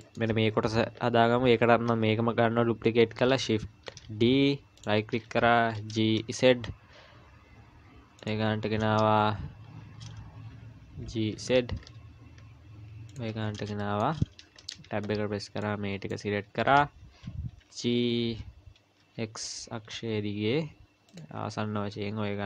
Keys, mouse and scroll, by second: 0.0 shift+middle click, 3.9 shift+d, 5.8 g, 8.4-9.0 scroll up 6, 11.0 g, 13.4-13.8 scroll down 5, 13.8 shift+middle click, 14.6 Tab, 15.6 click, 17.6 g, 21.4-22.4 scroll up 10.